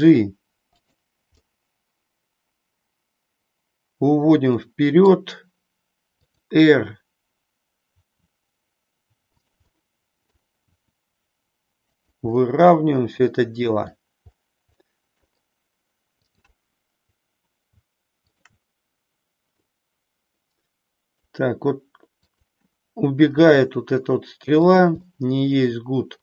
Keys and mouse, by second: 0.8 click, 1.4-5.2 middle drag, 8.0 r, 9.7 middle click, 10.7 r, 12.4-13.9 middle drag, 14.9 middle click, 16.3-17.3 drag, 18.3 shift+click, 19.6-21.2 middle drag, 23.4 g, 24.7 click, 25.0-26.2 middle drag.